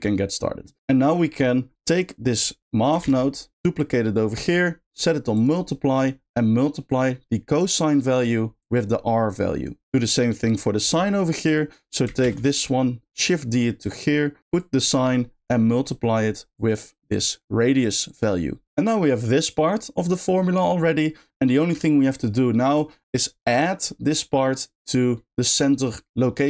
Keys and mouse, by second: 0.8 middle click, 1.2 middle click, 1.9 click, 3.8 shift+click, 4.5 shift+click, 5.8 middle click, 6.8 click, 7.1-8.1 drag, 8.6-9.6 drag, 9.8 middle click, 11.0 middle click, 11.4 click, 13.3 shift+click, 13.5 shift+click, 14.5 shift+click, 14.8 shift+click, 15.8 middle click, 16.5-17.8 drag, 18.0 click, 18.6 g.